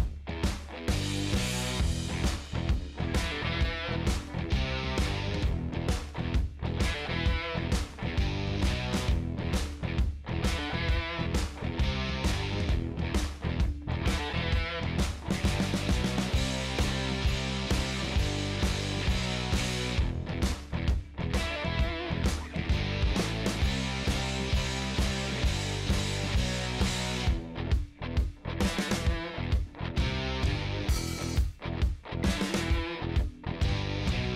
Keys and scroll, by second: 2.7 0, 3.0 ,, 4.5 5, 4.8 Return, 14.7 ctrl+space, 15.7 c, 16.0 b, 16.7 BackSpace, 17.5 Down, 17.7 Up.